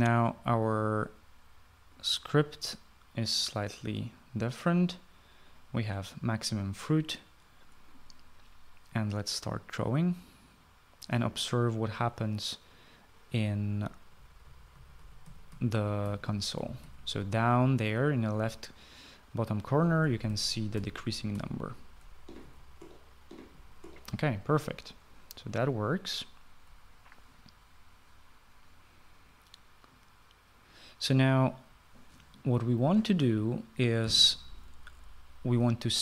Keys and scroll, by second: 14.7-17.8 typing, 20.4-25.0 typing, 25.0 Escape, 25.4 Escape.